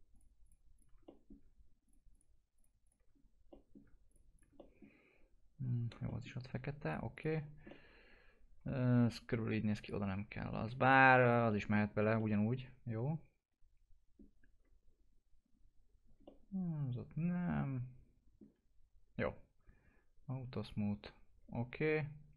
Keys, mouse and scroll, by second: 1.0 middle click, 1.8 ctrl+click, 3.5 middle click, 4.0 ctrl+click, 4.5 middle click, 5.1-5.7 scroll up 1, 6.0 middle click, 6.8 ctrl+click, 7.4 scroll down 1, 7.7-9.8 alt+middle drag, 9.8 alt+click, 11.4 alt+middle click, 11.8 scroll up 1, 12.1-14.9 alt+middle drag, 14.9 scroll up 1, 16.2-19.1 alt+middle drag, 19.1-20.5 scroll down 1, 20.5 click.